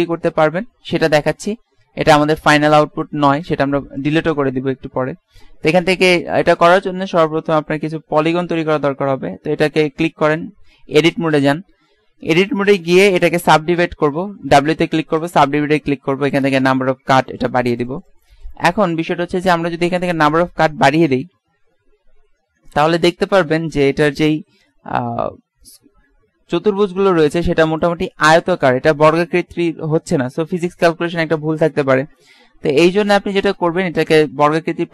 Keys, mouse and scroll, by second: 4.1-6.1 drag, 9.3 Tab, 14.2 w, 17.5-20.9 drag, 21.6 middle click, 26.3 click, 34.6 ctrl+z.